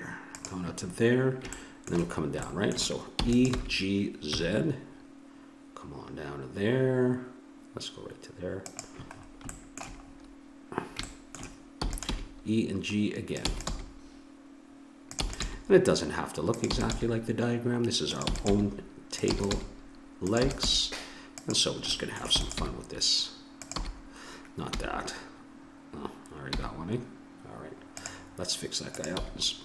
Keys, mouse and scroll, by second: 0.8 middle click, 0.9 middle click, 3.1 e, 3.5 g, 4.5-5.6 middle drag, 9.2-11.1 middle drag, 11.8 e, 12.1 g, 13.5 e, 13.8 g, 15.2 e, 15.5 g, 16.7 e, 16.9 g, 18.2-20.7 typing, 22.4 e, 22.6 g, 23.7 e, 29.0 click, 29.2 g.